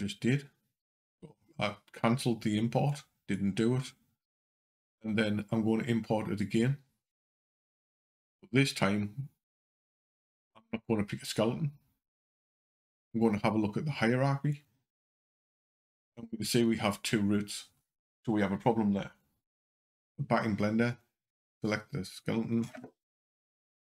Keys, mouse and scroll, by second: 6.2 click, 19.9 click, 23.5 o.